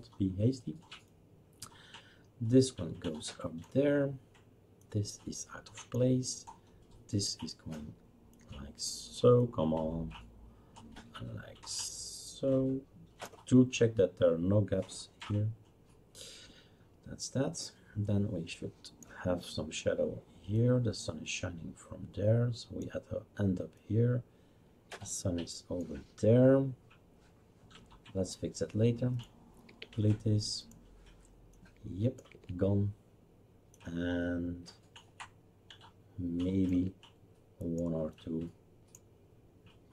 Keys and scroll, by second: 29.7 Delete, 32.3 Delete, 36.7 Delete.